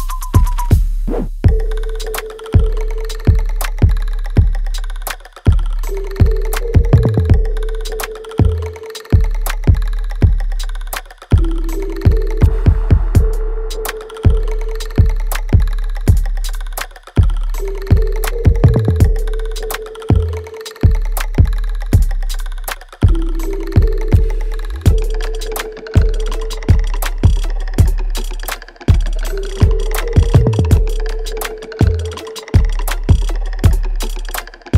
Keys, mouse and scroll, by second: 1.1 alt+right click, 1.5 alt+click, 2.7 alt+right click, 3.8-5.5 alt+drag, 5.5 right click, 6.1 click, 6.4 alt+right click, 6.8-8.6 alt+drag, 8.6 alt+right click, 9.0 alt+middle click, 9.5 right click, 9.9 alt+click, 11.0 alt+right click, 11.5 alt+click, 12.0-15.6 alt+right drag, 15.6 click, 17.8 alt+click, 22.9 click, 23.0 click, 27.0 alt+right click, 27.3 click, 30.3 alt+click, 30.9 alt+middle click, 31.3 alt+right click, 32.3 shift+click, 33.0 alt+click.